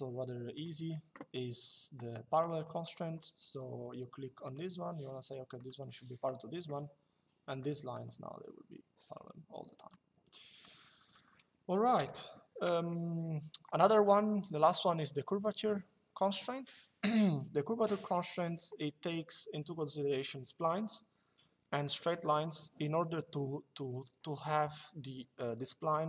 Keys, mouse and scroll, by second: 0.5 Escape, 2.3 click, 4.1 click, 5.3 click, 6.4 Escape, 7.3 click, 9.9 Escape, 10.3 click, 11.7 Delete, 12.4 middle click.